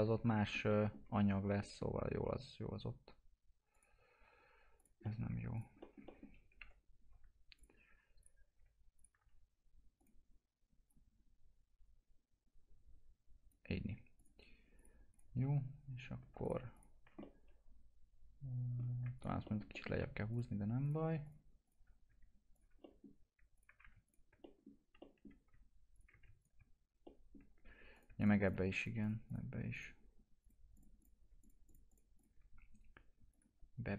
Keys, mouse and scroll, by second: 3.7 click, 5.0 middle click, 5.5 ctrl+click, 5.8 alt+middle click, 6.3-6.6 scroll down 1, 6.6 Delete, 7.5 click, 8.5 click, 17.3-19.1 alt+middle drag, 19.1 ctrl+click, 19.4 alt+middle click, 20.3 ctrl+click, 22.5 ctrl+click, 22.8 middle click, 23.5 ctrl+click, 24.4 middle click, 25.9 ctrl+click, 27.0 alt+middle click, 27.9 click.